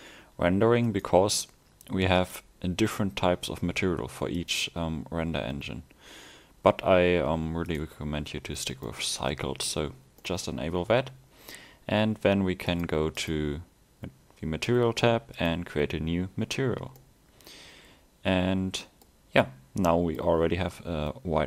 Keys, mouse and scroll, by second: 9.0 middle click, 9.9 scroll up 1, 10.3 middle click, 12.8 click, 17.0 middle click, 19.7 scroll down 1, 20.0 middle click.